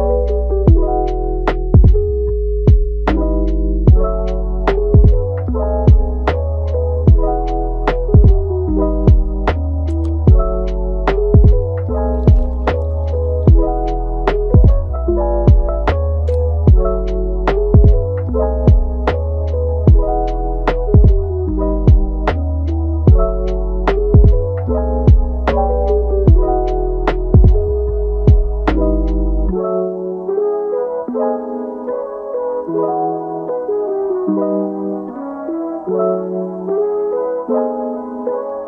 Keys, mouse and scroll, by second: 0.2-0.8 scroll up 4, 0.8-1.4 scroll down 4, 1.6 middle click, 2.4 scroll up 1, 2.9 Tab, 4.4-5.1 scroll down 2, 5.1 scroll down 3, 5.8 scroll up 1, 6.5 click, 7.3-7.8 middle drag, 7.8 ctrl+z, 8.2 scroll up 1, 8.2-11.3 middle drag, 15.6 click, 17.3-18.8 drag, 20.0 Tab, 20.7-21.7 right drag, 21.7 Tab, 26.4 click, 27.3-33.1 drag, 35.7 click, 36.6 ctrl+s, 38.0 click.